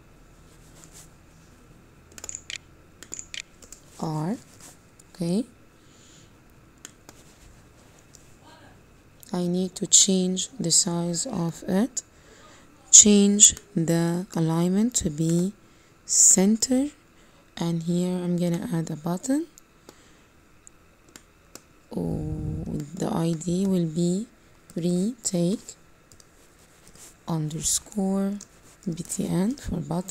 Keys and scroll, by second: 2.0 o, 2.8 i, 3.1 u, 12.8 Page_Up.